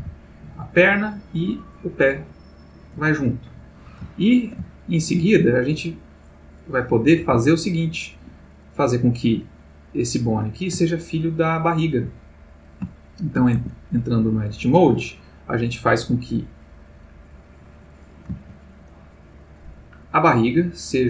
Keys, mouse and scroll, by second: 3.3 Escape, 4.1-5.3 ctrl+middle drag, 6.4 click, 7.2 g, 8.1 Escape, 9.1 click, 11.0 shift+click, 12.9-13.6 shift+middle drag, 13.6 shift+Tab, 15.6 click, 20.1 click.